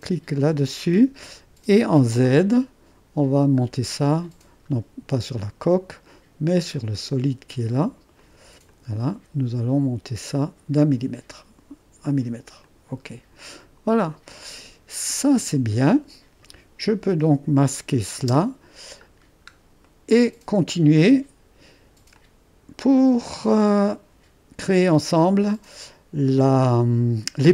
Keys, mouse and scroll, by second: 0.0-1.1 drag, 3.3-4.5 scroll up 2, 4.5-5.4 scroll down 2, 5.4-7.8 drag, 8.2 click, 8.9-10.1 middle drag, 12.7-14.8 middle drag, 14.8 click, 15.5 click, 15.6-17.7 middle drag, 17.7-19.2 drag, 18.3 space, 19.9 click, 21.1 click, 23.8-25.5 middle drag.